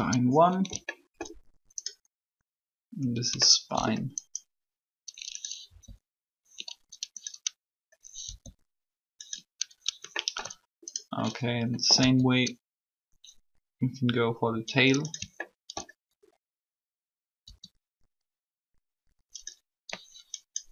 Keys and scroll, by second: 5.6 r, 8.2 r, 12.0 e, 17.4 e.